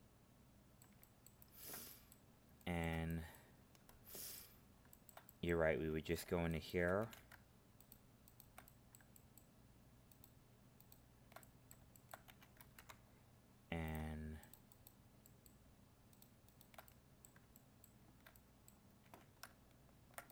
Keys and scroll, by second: 12.7 ctrl+Tab.